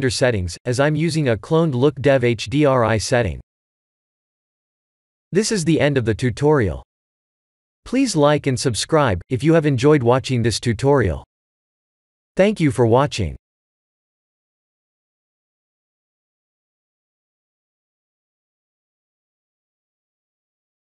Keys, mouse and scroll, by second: 0.8 click, 2.6 click, 3.3 click.